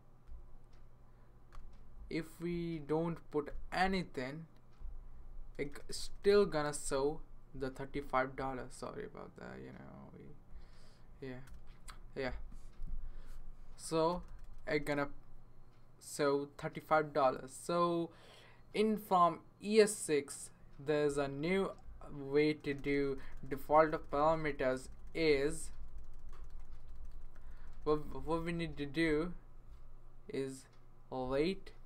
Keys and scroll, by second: 1.5 ;, 3.5 ;, 5.5 BackSpace, 5.9 BackSpace, 6.1 BackSpace, 11.4 BackSpace, 14.1 BackSpace, 14.3 BackSpace, 14.4 BackSpace, 14.6 BackSpace, 22.6 BackSpace, 22.8 BackSpace, 22.9 BackSpace, 23.1 BackSpace, 27.7 BackSpace, 27.9 BackSpace, 28.0 BackSpace, 28.1-30.8 BackSpace.